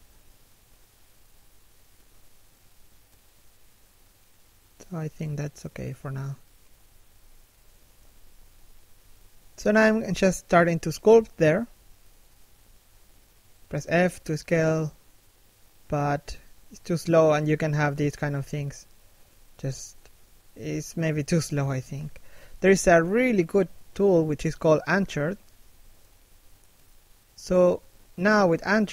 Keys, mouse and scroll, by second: 2.4 middle click, 2.5 click, 3.2 middle click, 4.2 1, 4.7 shift+middle click, 4.9-5.7 scroll down 1, 6.5 ctrl+1, 7.2 scroll up 1, 7.4 middle click, 8.0 shift+middle click, 9.2 click, 10.5 f, 10.9 click, 12.8 middle click, 14.6 click, 16.8 middle click, 17.7 middle click, 17.9 KP_1, 18.7 ctrl+KP_1, 26.2 click.